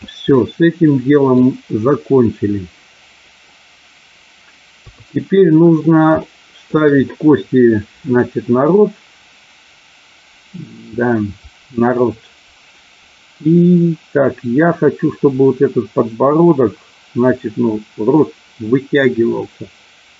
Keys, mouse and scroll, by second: 0.3-1.3 middle drag, 4.7 KP_3, 6.2 shift+middle click.